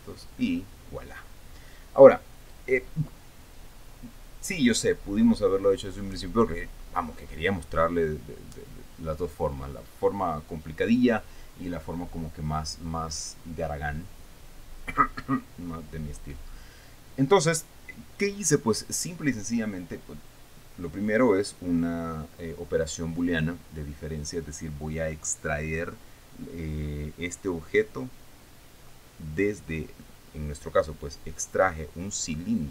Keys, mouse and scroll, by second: 0.3 click, 0.9-1.3 scroll down 2, 1.8 scroll up 2.